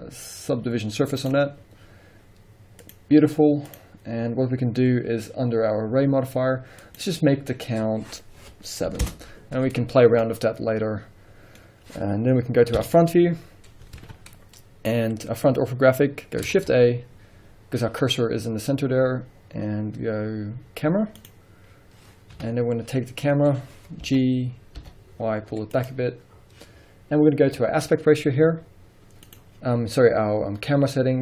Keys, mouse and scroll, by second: 3.7-10.2 drag, 9.1 Return, 9.8-10.2 scroll down 1, 10.2-25.9 middle drag, 12.8 KP_1, 13.5 scroll up 1, 14.0 alt+a, 14.7-16.6 scroll up 1, 16.6 shift+a, 22.4 KP_3, 24.1 g, 25.9 click, 29.3 click.